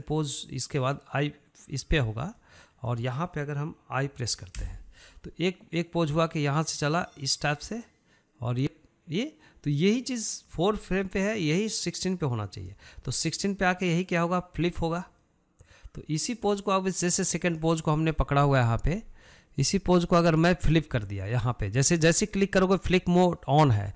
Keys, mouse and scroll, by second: 3.3-5.6 middle drag, 6.8-18.6 drag, 20.7 click.